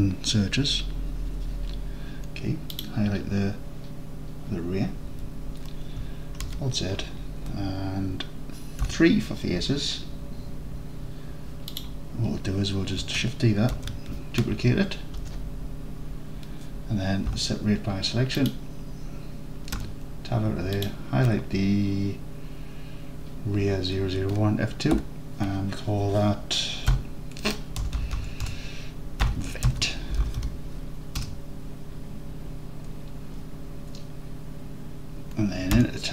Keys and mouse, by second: 2.8 click, 5.2 Tab, 6.5 alt+z, 7.0-8.2 drag, 7.0-8.2 middle drag, 7.0-8.2 right drag, 8.9 3, 11.8 click, 13.8 shift+d, 15.2 KP_Enter, 17.4 p, 19.8 Tab, 25.0 F2, 28.0 BackSpace, 28.5 BackSpace, 35.8 Tab.